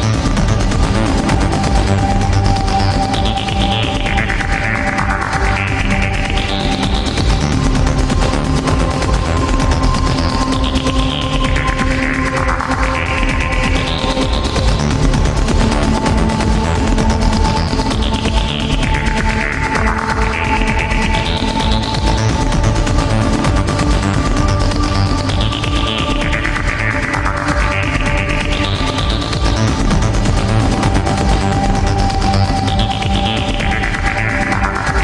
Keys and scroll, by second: 5.4 ctrl+z, 16.6 ctrl+z, 23.6 ctrl+z.